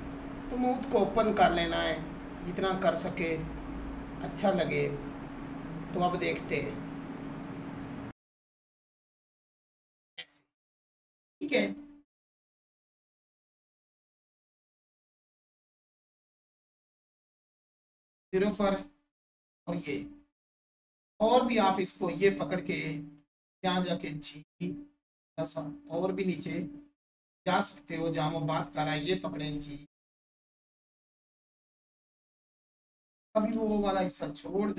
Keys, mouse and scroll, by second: 0.0 right click, 0.2 click, 2.0 click, 2.4 Tab, 6.5 click, 8.0 scroll down 1, 8.1 shift+click, 8.3 Tab, 8.9-12.6 drag, 12.6 Tab, 17.4 click, 18.5 Tab, 19.4-20.1 scroll up 1, 20.3-21.7 alt+shift+drag, 27.3 click, 27.8 scroll up 1, 28.6 click, 30.7 right click, 32.2 click.